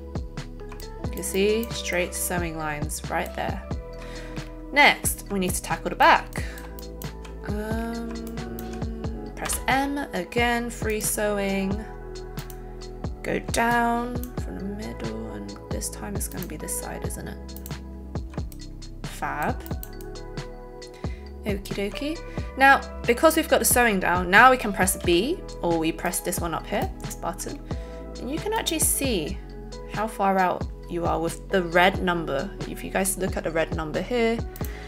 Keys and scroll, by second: 9.4 m, 25.1 b.